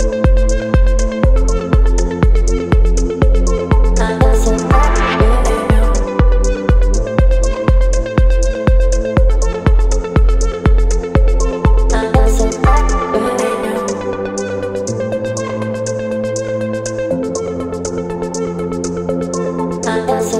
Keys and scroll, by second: 2.4 v, 9.6 Return, 11.8 space, 14.1 ctrl+m.